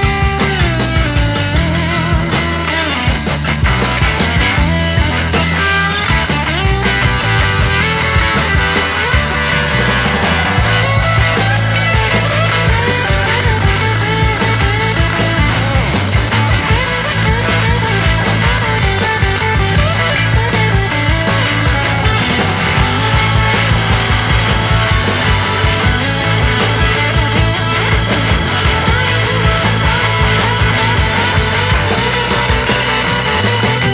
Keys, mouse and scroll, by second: 1.8 middle click, 2.3 KP_0, 2.9-3.4 scroll down 2, 3.4 ctrl+s, 3.8 click, 6.8 click, 7.6-9.7 drag, 9.7-10.1 scroll down 3, 11.1 click, 12.3-15.3 drag, 16.7-19.7 drag, 19.8-20.3 scroll up 3, 21.1-24.9 drag, 24.9-25.2 scroll up 1, 25.2-26.7 scroll down 1, 26.7-28.8 drag, 28.8-29.9 scroll down 2, 30.8 click, 31.5-32.3 scroll down 2.